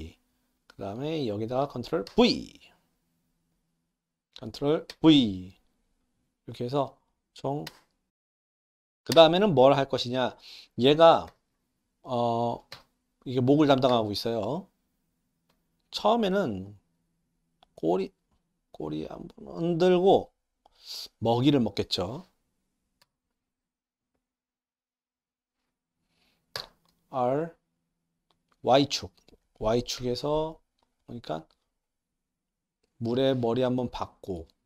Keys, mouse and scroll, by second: 0.8-1.5 drag, 2.1 ctrl+v, 3.6 click, 4.9 ctrl+v, 6.0 drag, 7.1-7.6 drag, 7.7 space, 8.1 ctrl+v, 8.3 middle drag, 9.2 space, 9.7 click, 11.3 r, 15.2-20.9 drag, 23.0 i, 24.5-25.3 drag, 26.5 r, 33.7-34.3 shift+middle drag.